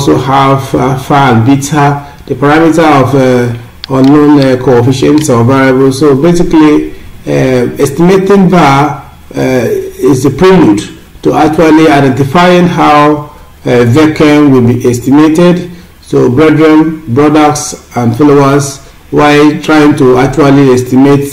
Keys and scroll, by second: 0.4 Down, 5.9 Up, 14.7 Up.